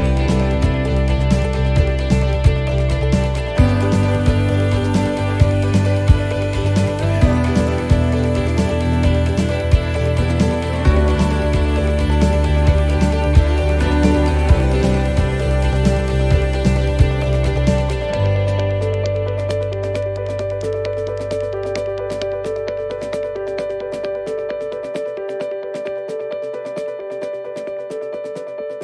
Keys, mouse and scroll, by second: 2.8 shift+middle click, 4.7 middle click, 5.4 shift+middle click, 6.6-7.1 scroll up 3, 7.9 right click, 8.8 c, 9.3 middle click, 9.3 scroll down 1, 14.1 shift+r, 16.6 middle click, 17.0-17.3 scroll up 2, 17.7 right click, 18.2 shift+right click, 18.6 right click, 19.1 right click, 19.4 right click, 19.9 right click, 20.3 middle click, 21.6 e, 23.2 middle click, 24.1 shift+middle click, 24.7 scroll up 2, 25.1 shift+middle click, 25.5-26.1 shift+scroll up 4, 26.2 shift+middle click, 26.8 middle click, 28.0 ctrl+r.